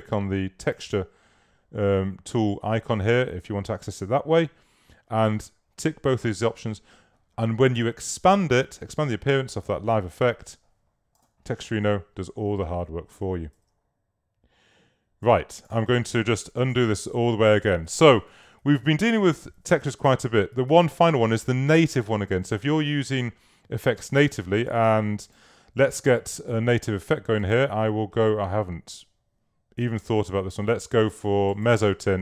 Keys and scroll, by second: 13.6 super+w, 16.5 super+z, 24.2 space.